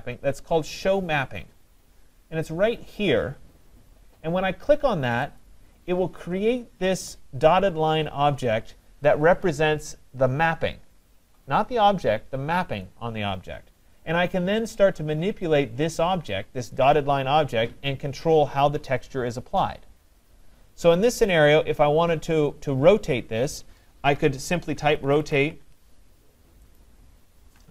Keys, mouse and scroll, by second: 5.4 click, 24.5-25.8 typing, 26.8 click.